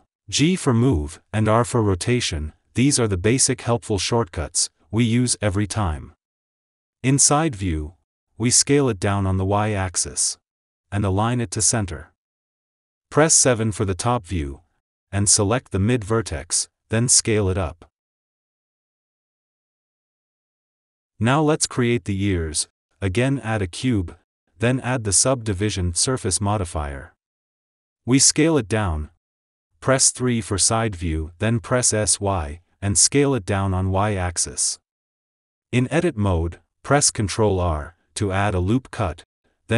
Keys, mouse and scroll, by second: 1.5 Tab, 1.9 click, 3.0-3.4 shift+middle drag, 3.4 g, 7.9 Tab, 8.0 KP_3, 9.6 s, 10.8 click, 11.0 g, 12.8 click, 13.0 Tab, 14.6 KP_7, 16.6 alt+z, 17.0 shift+click, 18.1 s, 20.1 Tab, 20.6 click, 20.9 ctrl+s, 22.2 shift+right click, 23.0 shift+a, 27.3-27.9 drag, 27.9 s, 30.7 KP_3, 31.5 s, 35.2-36.3 shift+middle drag, 36.3 Tab, 37.3 alt+z, 37.5 ctrl+r, 39.6 click.